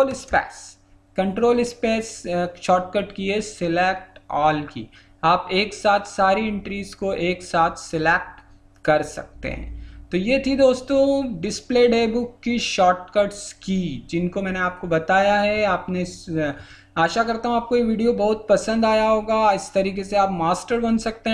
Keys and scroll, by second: 0.1 ctrl+space.